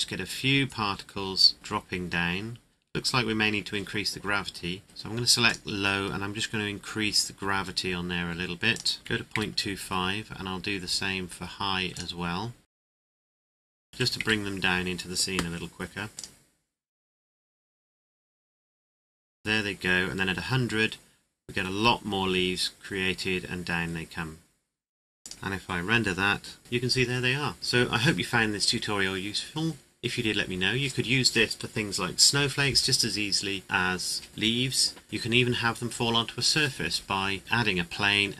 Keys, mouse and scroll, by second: 4.8 click, 6.1-6.9 scroll down 1, 8.7 click, 9.0 KP_2, 9.1 KP_5, 9.3 KP_Enter, 9.9-11.9 scroll up 1, 11.9 click, 13.6 click, 13.8 KP_Decimal, 14.0 KP_5, 14.1 KP_Enter, 16.1 click, 25.2 click, 25.4 shift+middle click, 26.6 scroll down 1.